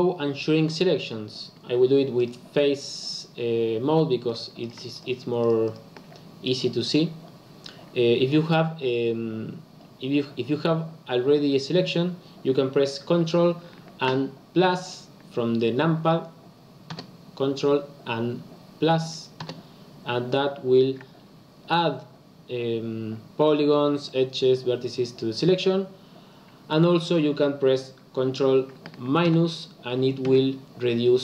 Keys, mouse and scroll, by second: 2.1 click, 4.5 click, 4.9 shift+click, 5.3 shift+click, 5.6 shift+click, 16.9 ctrl+KP_Add, 19.3 ctrl+KP_Add, 29.2 ctrl+KP_Subtract, 30.2 ctrl+KP_Subtract.